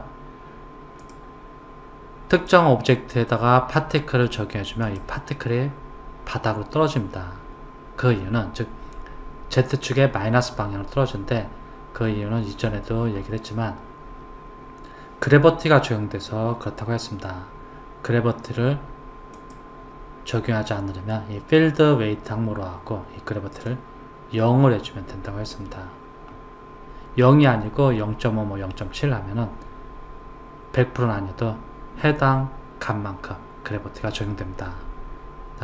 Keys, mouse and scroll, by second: 1.0 click, 2.3 click, 4.9 click, 12.2-13.3 scroll down 2, 19.3 click, 23.7 click.